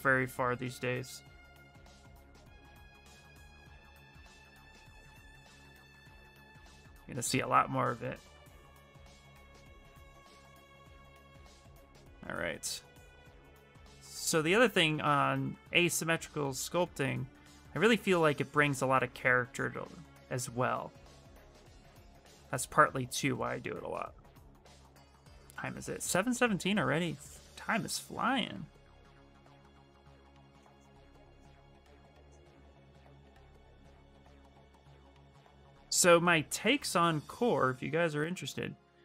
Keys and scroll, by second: 0.0 x, 0.9 x, 2.7 s, 29.3 s.